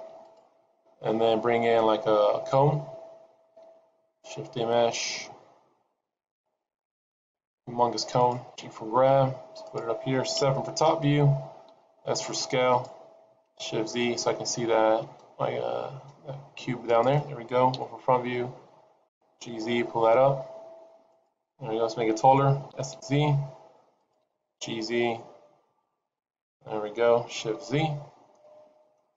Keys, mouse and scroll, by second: 0.9-2.0 scroll down 6, 3.6 shift+a, 7.6 s, 8.6 g, 10.4 KP_7, 11.7 s, 13.9 shift+z, 14.9 g, 17.6 KP_1, 19.0 g, 22.6 s, 24.1 g, 28.2 shift+z, 28.3 middle click.